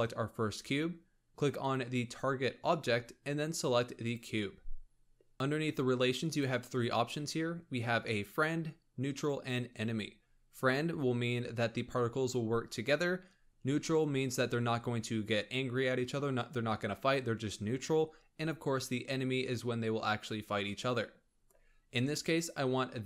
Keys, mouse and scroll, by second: 2.7 click, 6.2-9.3 drag.